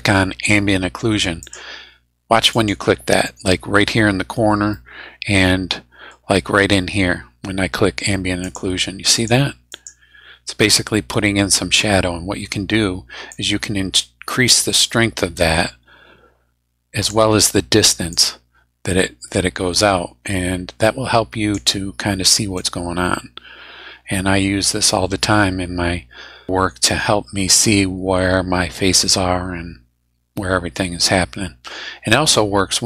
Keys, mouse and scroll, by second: 1.4 click, 2.5 click, 4.7-6.3 middle drag, 8.4 click, 9.1 click, 9.7 click, 13.3-17.3 drag, 18.1-21.7 drag, 22.6-26.5 drag, 26.5-32.2 middle drag.